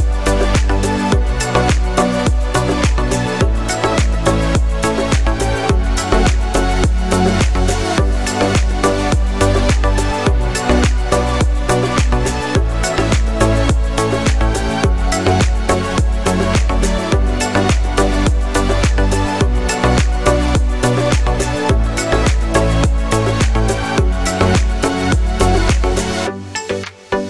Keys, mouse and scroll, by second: 0.2 g, 0.3 x, 2.9 click, 4.0 r, 4.7 z, 7.7 click, 10.4 click, 11.9 click, 12.7 click, 13.4 click, 14.7 click, 19.0 click, 19.3-20.3 drag, 21.4-23.0 drag.